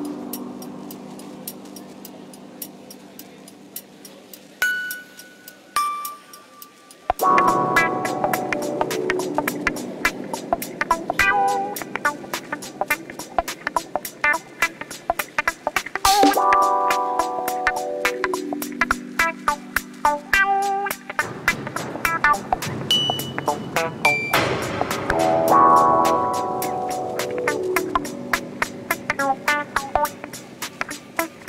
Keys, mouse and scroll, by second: 0.1-1.7 drag, 2.6 click, 3.4 click, 4.1 click, 4.9 click, 6.6 s, 8.5-10.6 drag, 10.9 s, 12.4 click, 12.9 s, 15.2 click, 16.1-18.5 drag, 18.7 s, 20.3-20.7 scroll down 2, 20.8-21.1 scroll up 1, 21.4-22.2 drag, 22.8 click, 23.1 scroll up 2, 24.3 click, 25.7-26.1 scroll up 1, 26.4-27.4 drag, 27.6 scroll down 2, 27.8-28.2 scroll up 1.